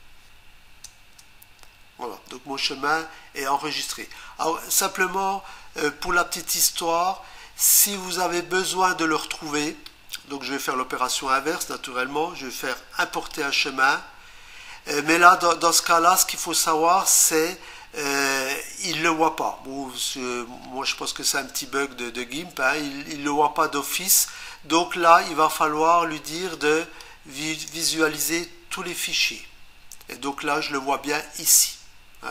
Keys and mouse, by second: 0.8 Return, 9.8 right click, 13.1 click, 16.4 click, 26.3 click, 27.0 click.